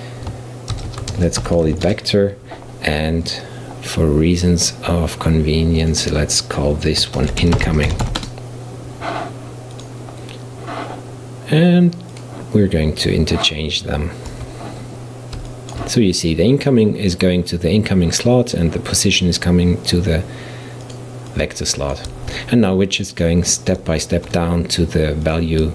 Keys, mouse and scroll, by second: 3.3 click, 5.9-8.9 drag, 9.8 click, 12.2 click, 14.3 Tab, 15.5-18.5 shift+middle drag, 20.9 click, 21.3-24.3 drag, 24.3 shift+d.